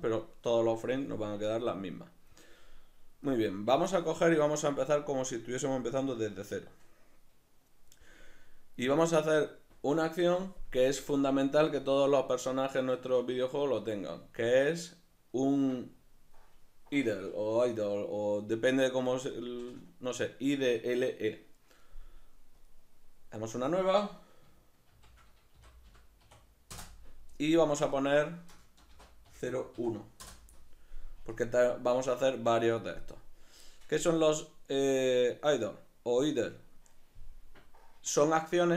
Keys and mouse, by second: 8.3-22.6 middle drag, 22.6-38.7 drag, 26.8 Return, 30.2 Return.